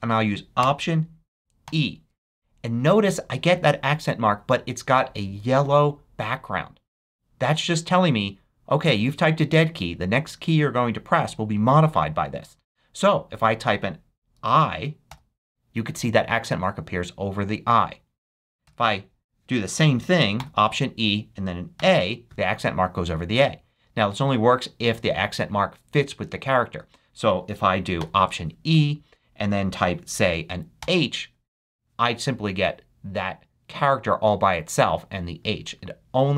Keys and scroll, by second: 1.6 alt+e, 15.0 i, 18.6 BackSpace, 20.3 alt+e, 21.7 a, 26.7 BackSpace, 27.4 alt+BackSpace, 27.9 alt+e, 30.8 h.